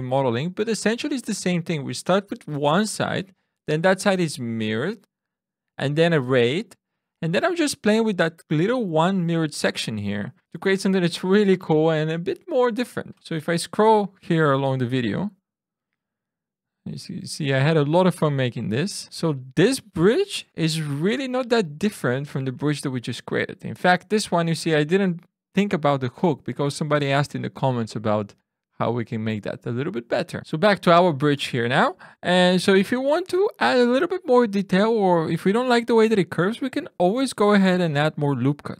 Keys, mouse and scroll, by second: 0.0-0.1 typing, 0.2 click, 0.4 Tab, 0.8 Tab, 0.9 click, 1.4 shift+r, 1.5 Tab, 1.7 Tab, 1.8 click, 1.9 e, 2.1 click, 2.2 ctrl+z, 2.2 ctrl+Tab, 2.4 a, 2.6 click, 2.8 click, 2.8 e, 3.0 click, 3.2 Tab, 3.9 click, 4.1 click, 4.2 Tab, 4.7 ctrl+Tab, 4.7 click, 5.4 ctrl+r, 5.5 ctrl+z, 5.5 ctrl+Tab, 5.7 click, 6.2-7.1 typing, 6.4 click, 7.0 click, 7.2 click, 8.3 ctrl+r, 8.3 ctrl+Tab, 8.3 click, 8.4 f, 8.7 f, 9.6 Tab, 9.7 ctrl+r, 9.9 ctrl+r, 10.4 click, 10.7 click, 10.7 f, 11.2 ctrl+r, 11.2 ctrl+z, 11.6 click, 11.7 ctrl+z, 11.7 Tab, 12.0 Tab, 12.1 click, 12.3 x, 12.4 click, 12.6 f, 12.7 ctrl+r, 13.0 ctrl+z, 13.1 t, 14.4 Tab, 14.4-17.2 typing, 15.0 Tab, 15.1 Tab, 15.3 ctrl+r, 15.8 Tab, 15.9 Tab, 19.1 Tab, 19.2 n, 19.4 drag, 19.8 drag, 19.9 g, 20.0 drag, 20.3 x, 20.4 ctrl+z, 20.5 click, 20.6 ctrl+space, 20.6 ctrl+space, 20.6 ctrl+,, 20.8 click, 21.2 click, 21.3 w, 21.4 a, 21.5 click, 22.1 click, 22.3 Tab, 22.3 Tab, 22.5 ctrl+6, 22.5 z, 22.8 click, 22.8 g, 23.1 Tab, 23.1 ctrl+6, 23.2 z, 23.5 m, 26.0 ctrl+4, 26.1-28.0 typing, 26.3 click, 26.8 ctrl+1, 27.0 ctrl+6, 27.4 click, 28.2 drag, 28.9 drag, 29.3 click, 29.6 drag, 29.6-30.3 typing, 30.4 alt+shift+super+u, 32.1 Tab.